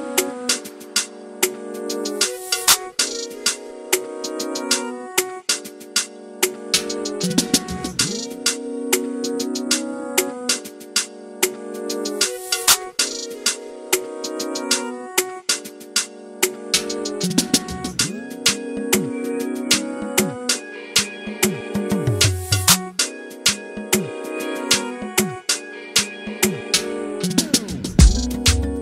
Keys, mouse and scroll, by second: 6.6 click, 7.4 shift+click, 9.5 shift+click, 10.8 alt+d, 12.6 r, 19.6 click, 22.9 click, 27.6 click, 28.5 click.